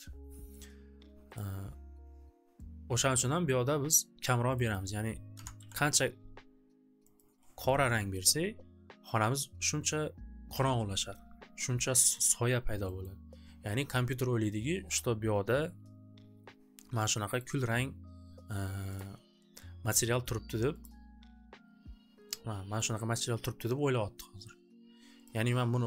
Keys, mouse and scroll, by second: 1.4 click, 3.9 click, 4.6 click, 4.8 click, 5.1-6.1 typing, 7.1 click, 11.6 click, 12.1 middle click, 12.1 click, 12.4 scroll, 13.0 scroll, 17.3 click, 18.9 click, 20.1 click, 20.3 click, 20.9 click, 22.7 click, 25.2 click.